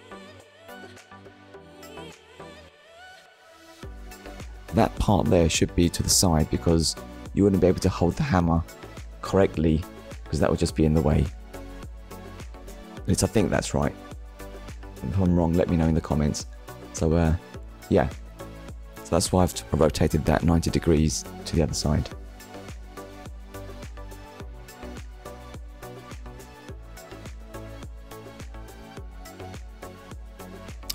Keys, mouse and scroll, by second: 0.5 scroll down 1, 1.0 middle click, 4.5 middle click, 7.3 click, 8.5 click, 9.8 click, 10.5 middle click, 12.3 click, 13.6 ctrl+click, 17.7 click, 18.5 click, 23.7 shift+middle click, 24.2 middle click, 29.4 middle click, 30.7 click.